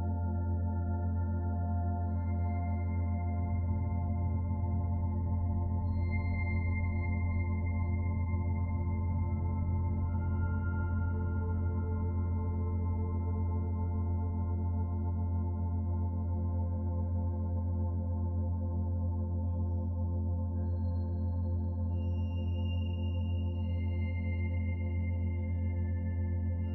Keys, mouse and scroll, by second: 1.4 click, 1.8 click, 2.1 click, 2.5 click, 5.5 shift+click, 12.0 middle click, 16.1 click, 18.3 click, 18.9 scroll down 1, 19.2 shift+middle click, 19.7 middle click, 20.8 click, 22.2 middle click, 23.2 scroll down 1, 23.9-24.3 scroll up 2, 24.5 shift+middle click, 26.2 click.